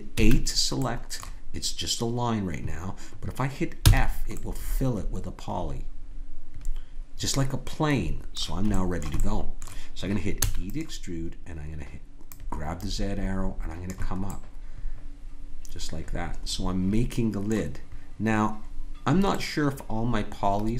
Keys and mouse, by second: 0.2 a, 3.9 f, 4.4-6.4 middle drag, 8.7-11.4 middle drag, 10.4 e, 12.2-14.2 drag, 14.3-16.3 middle drag, 19.3-20.7 middle drag.